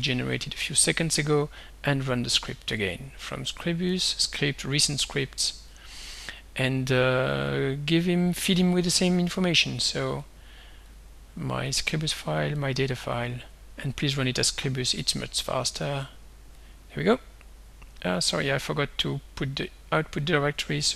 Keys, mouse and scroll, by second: 0.0 Delete, 1.0 click, 2.8 click, 4.0 click, 5.7 click, 7.4 click, 8.6 click, 9.6 click, 10.3 click, 10.9 click, 11.7 click, 12.6-13.6 drag, 14.2 click, 15.0 click, 16.6 click, 18.2 click, 20.2-20.9 drag.